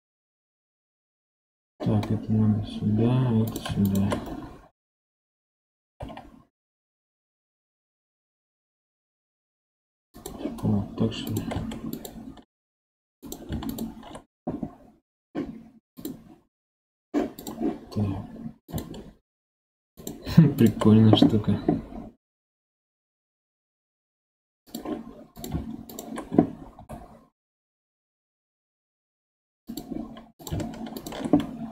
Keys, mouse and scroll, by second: 3.4 click, 3.8 shift+click, 5.7 g, 11.2 click, 11.8 shift+click, 13.1 click, 13.6 shift+click, 18.6 click, 19.9 click, 20.5 shift+click, 22.1 g, 25.3 click, 25.8 shift+click, 26.7 g, 30.3 click, 30.9 shift+click.